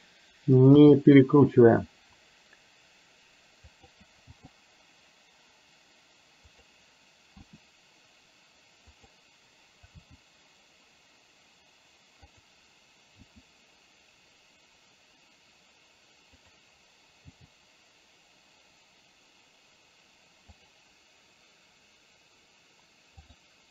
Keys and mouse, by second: 0.8 r, 4.4 g, 7.5 r, 9.9 g, 13.2 r, 17.3 g, 23.2 click.